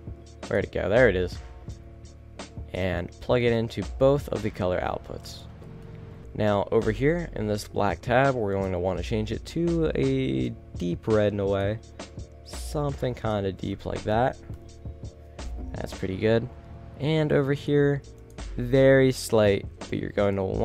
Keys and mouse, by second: 14.7-17.9 middle drag, 17.9-20.5 drag.